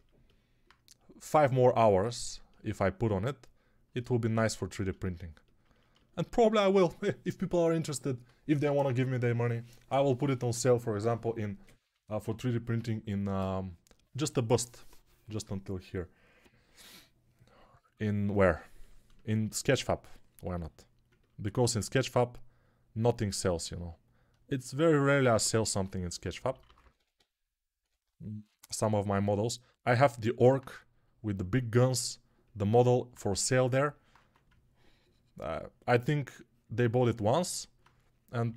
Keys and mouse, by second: 19.7-37.1 alt+drag, 25.6-27.7 typing, 34.1 1, 37.1-38.5 ctrl+alt+right drag.